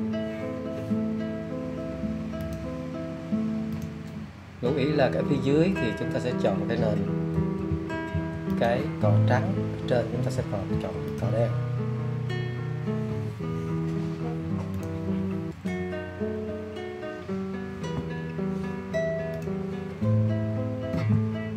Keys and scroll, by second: 7.7 [, 8.0 [, 8.4 [, 10.7 [, 11.0 [, 21.2 alt+x.